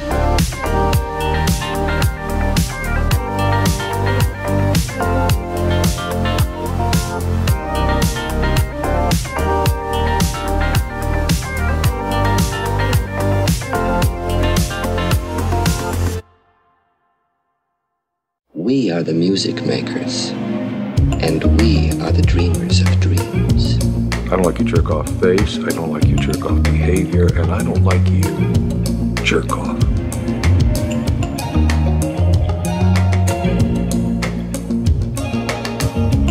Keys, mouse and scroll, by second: 0.0 click, 1.1-2.9 typing, 2.4 click, 3.8 shift+click, 4.4 g, 4.6 z, 6.4 click, 6.9 click, 8.0 g, 8.2 z, 10.0 Escape, 11.2 g, 11.5 z, 14.0 click, 14.4 shift+click, 14.9 g, 15.1 z, 16.1 click, 17.1 click, 17.6 typing, 17.9-19.0 middle drag, 20.4 Tab, 21.3 click, 26.0-26.8 drag, 27.3-27.7 drag, 27.4-28.2 typing, 29.4-30.6 drag, 31.0 click, 34.4 click, 35.8 click.